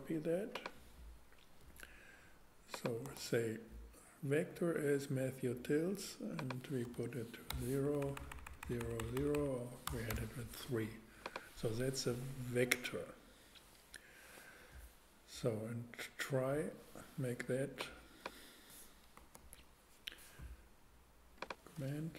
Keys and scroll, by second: 3.0 super+v, 6.8 BackSpace, 7.5 0, 7.8 Left, 9.9 BackSpace, 10.1 3, 19.3 super+x.